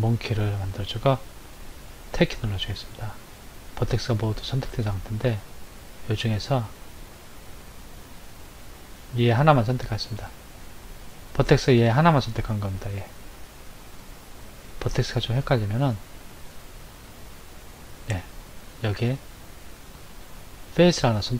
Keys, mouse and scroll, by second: 1.9 Tab, 4.4 click, 5.0 middle click, 6.9-7.8 scroll up 5, 10.1 click, 12.1 click, 13.4 click, 15.0 click, 16.2 click, 18.0 click, 20.0 middle click.